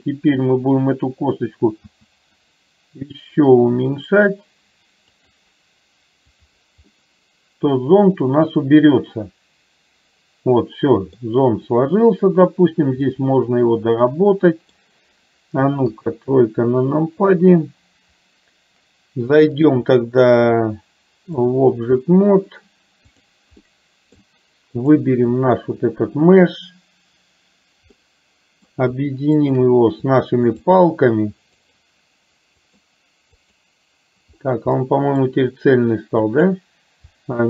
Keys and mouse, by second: 6.4 click, 6.9-11.3 middle drag, 13.1-14.9 middle drag, 15.9 KP_2, 17.3 KP_3, 19.6-21.6 drag, 23.1 click, 23.8 middle click, 24.9 click, 28.1-28.8 middle drag, 29.5 shift+click, 30.8 click, 31.6 click, 33.5 click, 34.8-35.4 middle drag, 36.4 click.